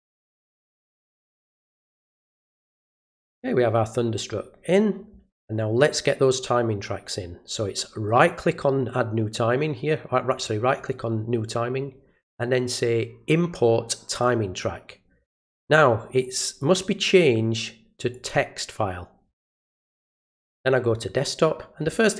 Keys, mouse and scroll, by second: 0.0 click, 1.5 click, 8.1 right click, 10.3 click, 10.7 right click, 14.1 click, 16.2 click, 18.1 click, 20.4 click.